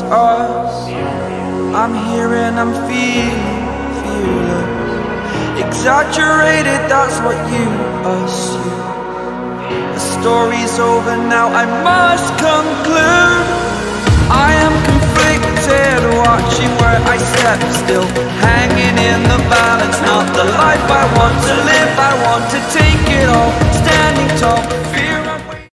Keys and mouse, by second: 0.8 click, 2.5 right click, 3.7 click, 5.2 click, 7.8 click, 9.0 click, 11.5 click, 12.8 click, 13.5 click, 16.0 Down, 16.4 Down, 16.7-17.9 Down, 18.1 Down.